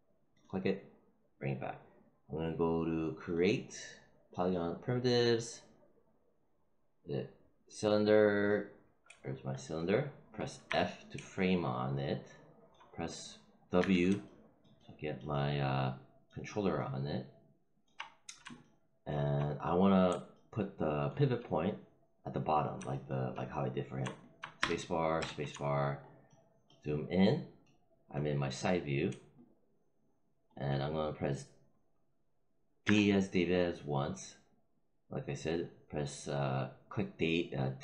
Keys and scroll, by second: 10.6 f, 13.7 w, 24.5 space, 32.7 d.